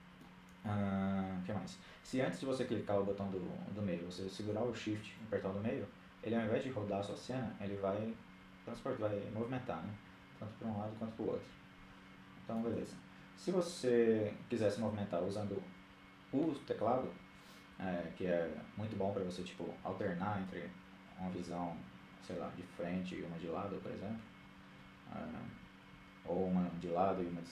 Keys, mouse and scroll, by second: 4.0-5.4 middle drag, 19.4 KP_1, 22.4 KP_3, 22.9 KP_1, 23.6-25.4 middle drag, 24.7 KP_3, 25.2 KP_1, 26.1 KP_3, 26.6 KP_7.